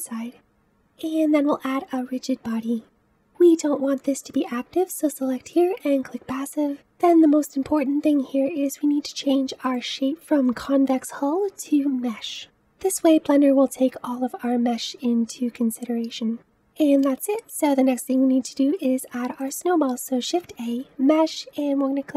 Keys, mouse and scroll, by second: 1.1-3.9 drag, 4.1-6.7 drag, 9.5 click, 12.3 middle click, 16.5-19.3 middle drag, 19.3 click, 20.1 shift+a.